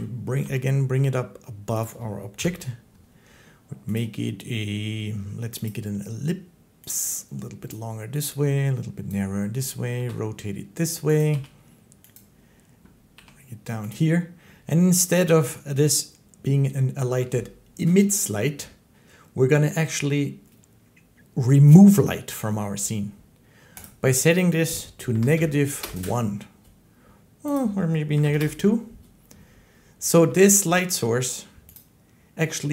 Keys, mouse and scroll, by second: 0.0-0.2 typing, 1.6 click, 2.2 7, 3.8 click, 5.4 click, 7.5 click, 9.7 r, 11.0 click, 11.1 g, 12.0 click, 12.9 g, 13.7 click, 23.7 click, 25.0 typing, 25.7 Return, 27.4 click, 27.4-28.2 typing, 30.1 g, 31.6 click.